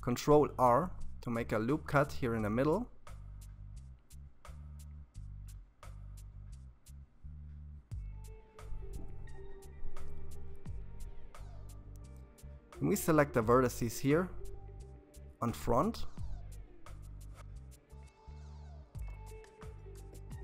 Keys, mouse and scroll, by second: 4.3-7.3 middle drag, 10.5 alt+a, 11.0 c, 16.2 KP_1, 17.5-18.8 scroll up 2, 18.8 KP_3.